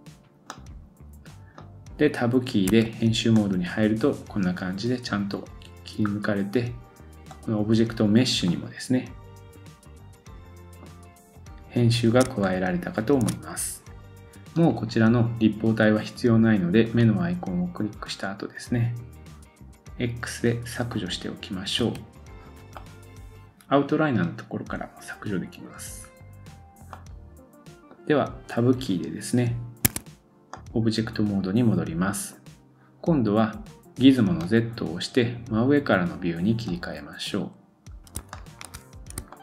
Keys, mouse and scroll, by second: 2.7 Tab, 6.1 scroll up 1, 7.4-17.1 drag, 8.5 middle click, 12.4 shift+middle click, 20.9 click, 21.8 x, 22.7 middle click, 26.0-26.9 scroll down 1, 26.9 middle click, 29.9 Tab, 30.5 middle click, 34.4 click, 36.7 click, 37.9-38.3 scroll down 2, 38.3-38.7 shift+middle drag, 38.8-39.3 scroll up 3, 39.3-39.4 shift+middle drag.